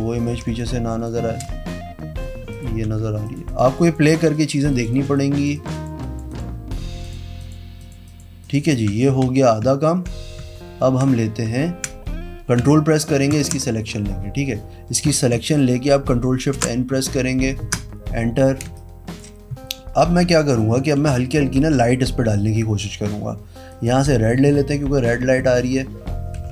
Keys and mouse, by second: 0.0-0.4 typing, 0.5 click, 2.4 click, 2.8 e, 3.2 click, 3.4 click, 3.6 click, 3.8 click, 4.3 click, 4.7 click, 4.9 click, 5.5 click, 6.0 click, 6.2 click, 7.0 click, 7.4 click, 7.7 click, 8.0 click, 8.4 click, 8.9 v, 9.2 z, 13.2 ctrl+click, 16.5 ctrl+shift+n, 17.6 KP_Enter, 18.6 space, 20.9 p, 23.7 click, 25.3 n, 26.3 [, 26.4 [.